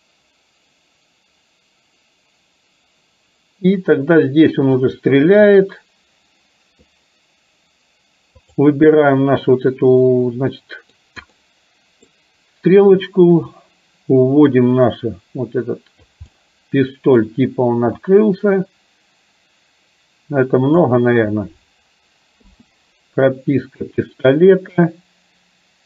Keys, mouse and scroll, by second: 8.4 click, 10.1 middle click, 11.4 middle click, 13.8-16.3 drag, 16.4-17.4 middle drag, 18.4-21.0 drag, 22.5 i.